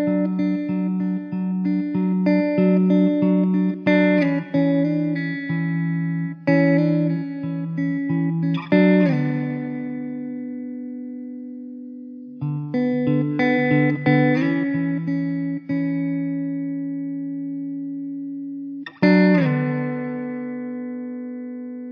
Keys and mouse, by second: 5.3 alt+middle click, 8.1 middle click, 8.5 e, 9.4 alt+w, 10.0 middle click, 10.0 middle click, 11.1 w, 14.4 middle click, 17.0 middle click, 19.6 e.